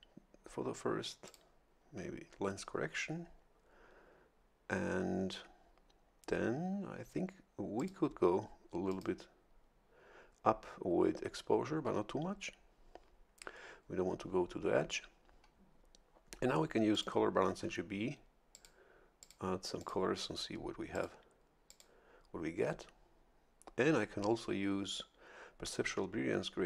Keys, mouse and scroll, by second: 1.2 click, 7.8 click, 8.9 click, 16.9 click, 18.5 click, 19.2 click, 19.8 click, 20.9 click, 21.7 click.